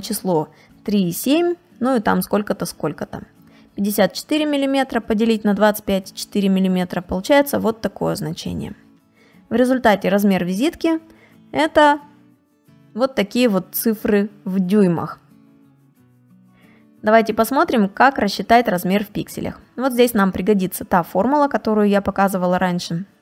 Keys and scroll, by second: 8.4 space, 10.8 space, 14.4 space, 18.0 space.